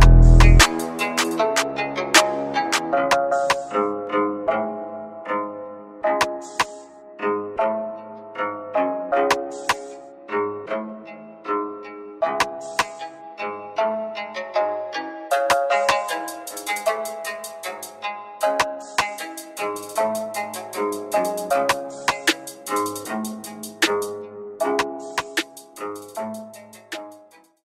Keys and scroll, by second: 0.4-1.2 typing, 4.6-6.3 typing, 8.4-9.2 typing, 12.8 `.